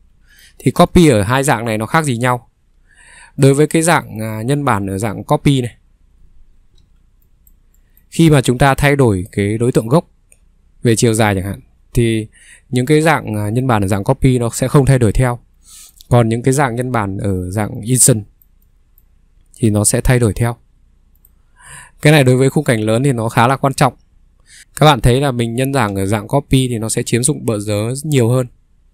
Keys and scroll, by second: 1.8 ctrl+3, 2.7 Escape, 6.8 ctrl+3, 9.6 Escape, 17.3 ctrl+3, 20.3 Escape, 23.3 Escape, 25.9 ctrl+3.